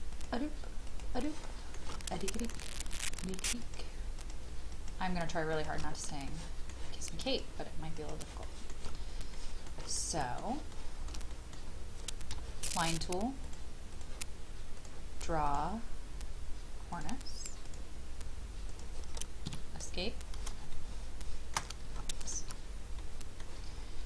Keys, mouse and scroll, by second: 0.1 shift+click, 0.8 shift+click, 1.2 shift+middle click, 2.5 scroll up 1, 3.0 shift+click, 3.6 shift+click, 4.2 shift+click, 4.7 shift+click, 5.5 shift+click, 6.3 shift+middle click, 7.3 shift+click, 7.9 shift+click, 8.4 shift+middle click, 8.9 scroll down 1, 9.3 shift+middle click, 9.9 middle click, 10.7 shift+middle click, 11.3 middle click, 13.4-18.7 drag, 19.4 Escape, 20.0 scroll down 1, 20.7-21.7 middle drag, 22.0 shift+middle click, 22.4-22.9 shift+scroll down 2, 23.0 middle click, 23.6-24.0 scroll up 1.